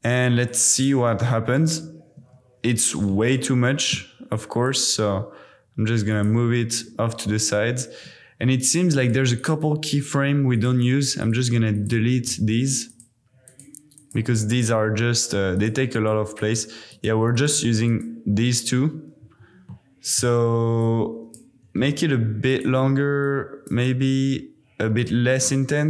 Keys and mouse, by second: 0.4-0.8 drag, 0.9 space, 2.2 space, 4.5 click, 4.8 g, 6.1 click, 9.0 click, 9.4 click, 10.5 click, 11.2 click, 11.7 shift+click, 12.3 x, 12.9 click, 13.5 click, 13.9 click, 15.0 x, 15.5 click, 15.9 click, 16.4 click, 16.9 click, 17.3 click, 17.9 click, 19.2 a, 19.9 middle click, 21.0 middle click, 21.6 g, 21.8 x, 22.5 click, 23.3-24.7 drag, 25.1 click.